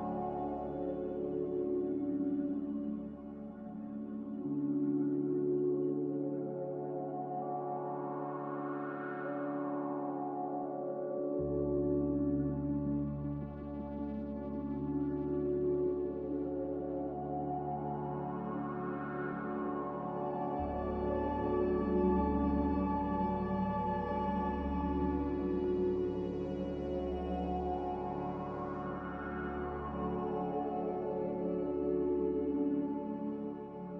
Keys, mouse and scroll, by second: 22.2 z.